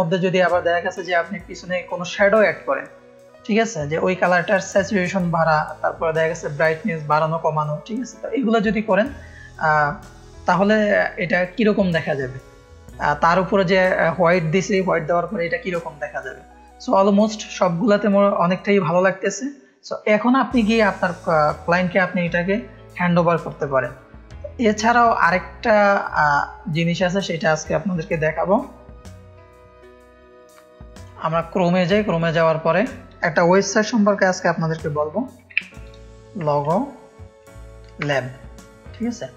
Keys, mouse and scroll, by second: 3.3 click, 4.1 click, 4.1 space, 25.6-26.7 drag, 26.4 space, 28.3 ctrl+KP_0, 30.9 click, 32.1 click, 32.7 click, 35.2-36.9 typing, 38.0 Return.